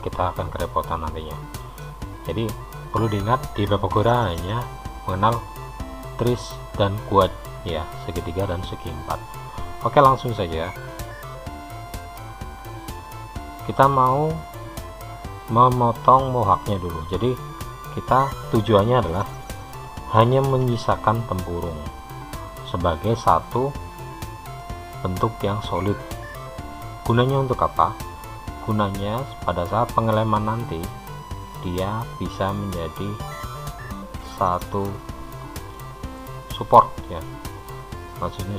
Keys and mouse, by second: 11.3 click, 12.4-18.9 middle drag, 21.8 shift+h, 24.9-28.1 middle drag, 35.0-36.8 middle drag.